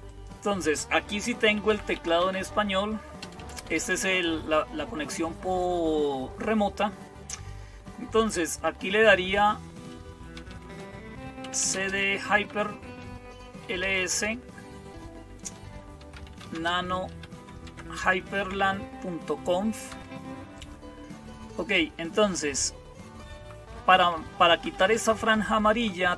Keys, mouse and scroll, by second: 1.5-26.1 typing, 10.4 Return, 12.7 Return, 23.3 Down, 23.5 Down, 23.6 Down, 23.8 Down, 24.2 Down, 24.6 Down, 24.8 Down, 25.0 Down, 25.2 Down, 25.4 Down, 25.6 Down.